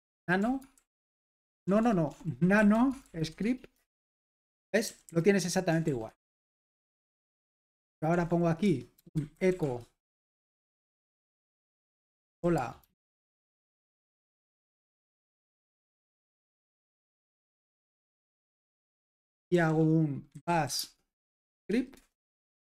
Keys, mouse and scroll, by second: 0.0-3.7 typing, 5.0-5.7 typing, 6.0 Escape, 7.2-14.3 typing, 8.6 Return, 16.7-17.5 typing, 17.8 Return, 18.5 super+h, 19.5-21.8 typing, 21.9 Return.